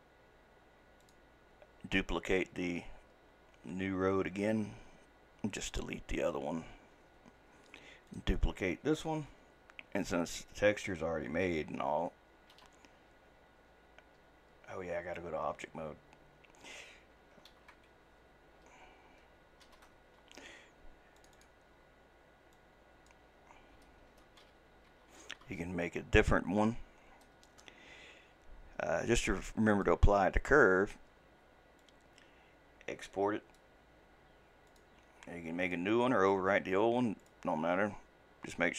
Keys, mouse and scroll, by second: 1.0 click, 5.6 click, 7.4 Delete, 8.1 click, 12.5 ctrl+d, 15.2-17.5 drag, 17.5 ctrl+d, 19.6 shift+d, 21.2 click, 21.4-24.5 drag, 29.7-34.9 drag.